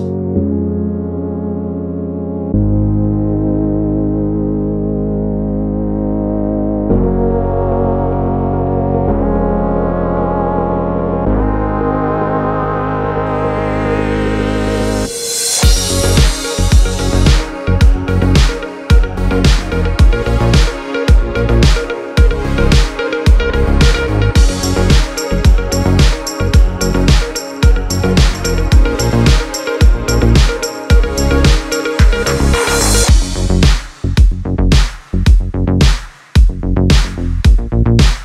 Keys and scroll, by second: 13.9 u, 23.5 v.